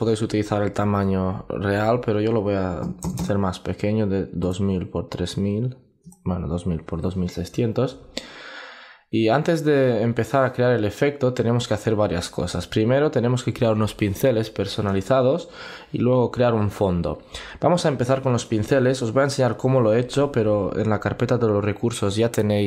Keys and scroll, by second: 0.4 alt+super+i.